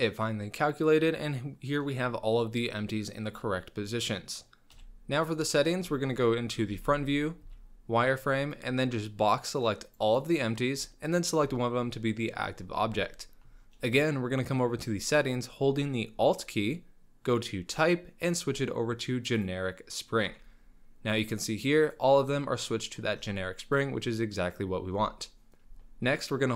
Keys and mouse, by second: 0.0-1.9 middle drag, 3.6-4.4 middle drag, 4.7 KP_1, 5.7 shift+click, 6.7 alt+a, 7.4 z, 8.6-10.0 drag, 11.1 shift+click, 13.1-13.4 shift+middle drag, 17.7-19.5 alt+drag, 21.6 drag, 21.9 click, 23.7-24.6 drag, 25.6 ctrl+z.